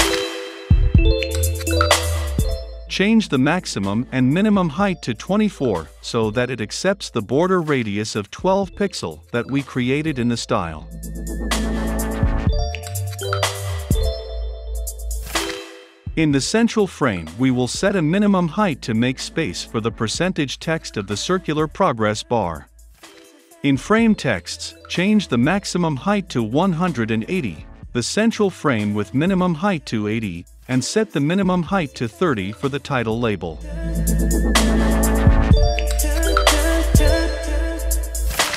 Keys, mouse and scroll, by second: 2.2 Tab, 3.7 right click, 4.1 click, 4.9-11.4 drag, 11.4 Left, 11.6 Return, 11.9 >, 13.2-24.0 drag, 24.0-25.6 middle drag, 25.6 Return, 27.4-38.5 drag.